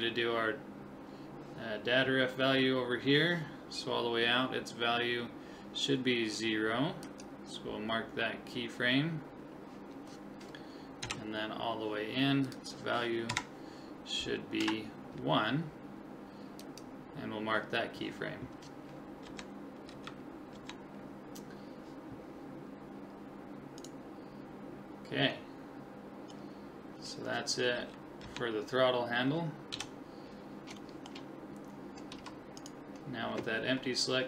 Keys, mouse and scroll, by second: 7.0-8.9 drag, 11.0 Right, 12.5 click, 16.6 click, 19.3 Left, 19.9 Right, 20.6 Left, 23.9-25.8 right drag, 25.0-27.3 middle drag, 27.8 Right, 28.2 Left, 29.7 KP_7, 30.8-32.6 middle drag, 32.1 a, 32.6-34.2 right drag.